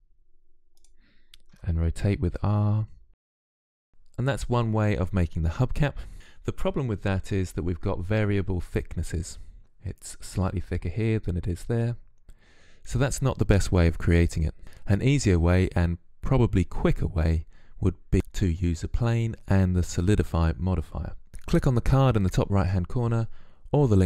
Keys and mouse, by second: 1.3 r, 3.5-6.1 typing, 6.1 Tab.